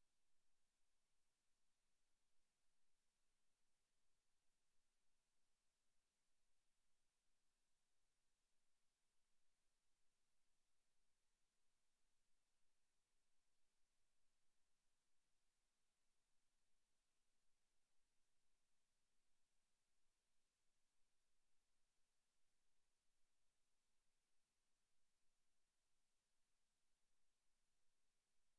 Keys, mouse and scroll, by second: 19.9-20.2 scroll down 5, 20.4 Tab, 21.1 z, 21.9 Tab, 23.8 click, 27.0-27.4 scroll up 5, 28.0 shift+middle click.